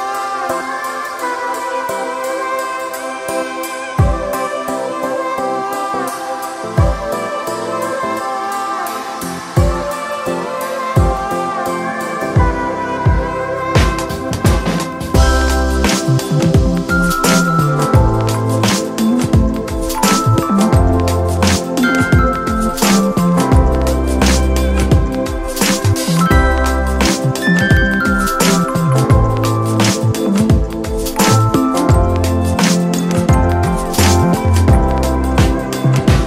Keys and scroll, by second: 14.2 space.